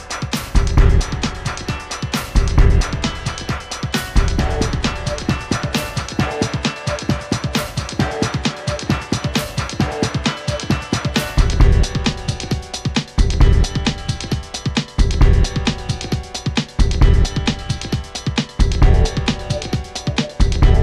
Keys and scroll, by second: 7.5 a, 9.3 v, 18.9 a.